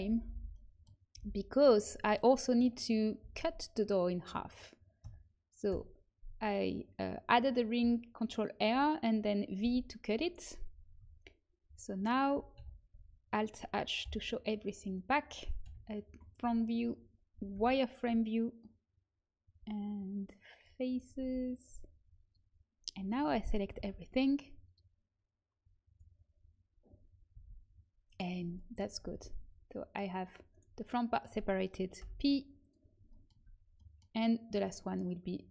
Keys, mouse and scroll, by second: 1.1 h, 3.1 ctrl+r, 9.5 v, 11.0 a, 12.5 alt+h, 14.0 Insert, 15.6 KP_7, 16.3 a, 17.5 z, 18.0 a, 20.5 click, 21.1 m, 23.7 b, 27.3 g, 28.5 middle click, 28.9 z, 29.1 g, 31.9 p, 33.3 Tab, 34.4-35.5 middle drag.